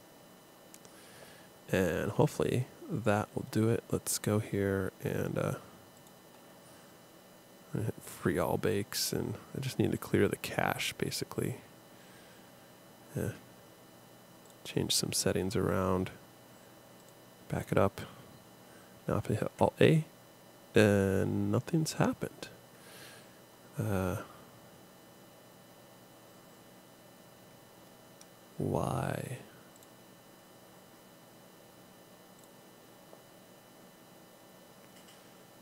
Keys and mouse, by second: 2.2 click, 15.9 click, 19.4 alt+a, 22.0-23.1 drag.